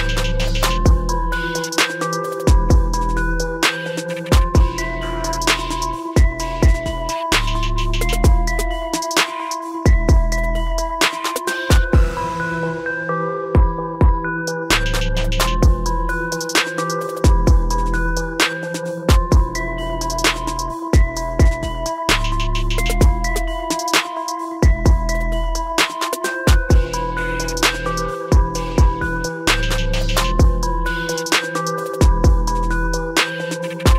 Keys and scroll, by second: 27.4 ctrl+t.